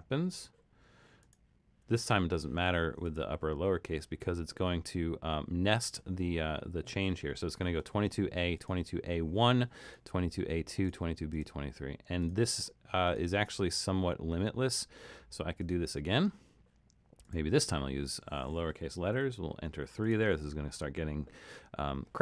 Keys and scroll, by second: 0.3 2, 19.2 3.